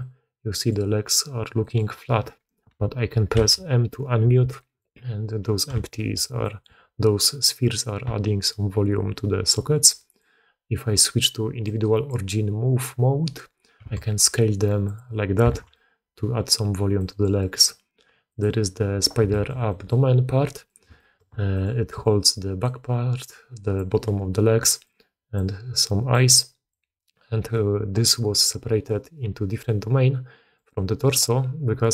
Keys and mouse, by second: 1.5 click, 3.3 m, 4.5 click, 5.8 shift+drag, 10.1-12.0 drag, 13.7 s, 15.4 alt+a, 15.6-16.4 drag, 16.9 click, 19.2 click, 19.3 shift+middle click, 19.6 middle drag, 20.6 middle click, 20.9 shift+middle drag, 21.4 middle click, 21.8-24.0 d, 21.9 click, 23.1 click, 24.4-25.7 d, 24.7 click, 25.7 click, 26.1 d, 26.2 click, 26.2-27.3 d, 31.6-31.9 d.